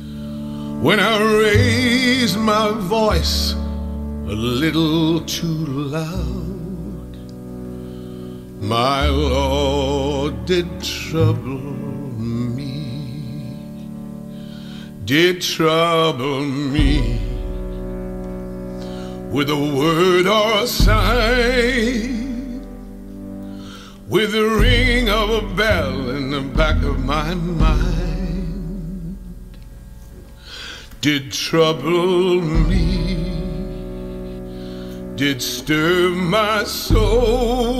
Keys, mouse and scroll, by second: 0.0-1.1 middle drag, 1.1-4.0 drag, 4.0-5.9 scroll up 6, 5.9 click, 6.1 middle click, 6.1-7.0 scroll, 6.4-7.6 middle drag, 7.6 click, 8.5 m, 8.7-12.1 drag, 12.1 scroll, 13.6 click, 13.9-15.3 scroll down 17, 14.2 click, 15.3-16.3 scroll up 6, 16.3-17.2 scroll down 5, 17.2-18.7 scroll up 4, 18.7-19.6 scroll down 6, 19.6-20.0 scroll up 3, 20.0-20.4 scroll down 5, 20.4-21.6 scroll up 4, 21.6-22.2 scroll down 5, 22.2-22.7 scroll up 6, 23.8 middle click, 24.2 scroll up 3, 24.4-24.8 scroll down 6, 24.9 t, 25.2-26.7 middle drag, 25.2-25.6 scroll down 7, 25.6-26.7 scroll up 8, 26.7 t, 28.5-30.5 drag, 30.3-31.2 typing, 32.6 typing, 34.4 click, 35.3-35.7 typing, 35.9 Return, 37.6 middle click, 37.6 scroll.